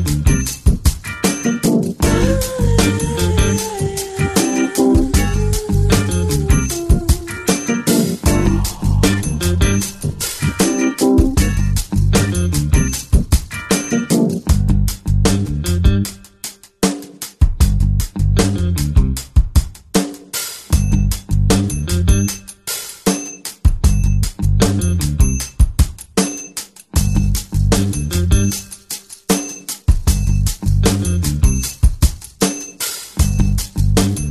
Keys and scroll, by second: 6.8 ctrl+space, 13.7-15.5 typing, 27.6 typing, 33.1 [, 33.5 [, 33.8 [.